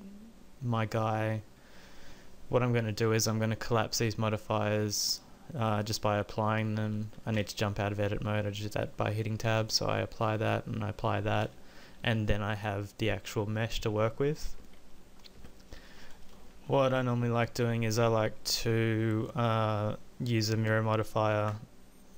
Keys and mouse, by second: 7.4 Tab, 11.1 middle click, 11.6 Tab, 14.6 KP_5, 15.4 KP_1, 16.5 KP_5, 18.4-19.7 middle drag.